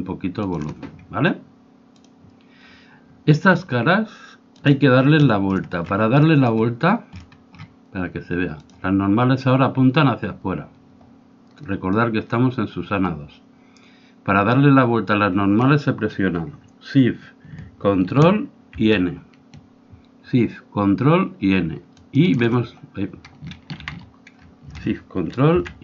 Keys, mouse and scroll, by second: 2.2-4.0 drag, 4.6-6.2 drag, 5.2 middle click, 5.2-6.2 right drag, 6.2-8.6 middle drag, 8.6-10.5 drag, 8.6-10.2 right drag, 21.9-23.7 drag, 23.7 ctrl+z.